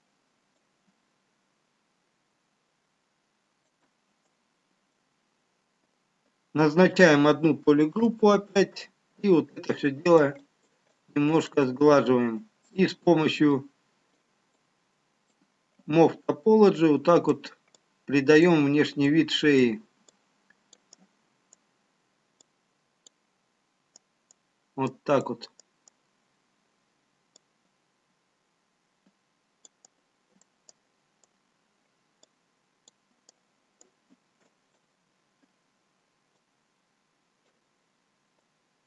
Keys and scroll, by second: 11.8 ctrl+w.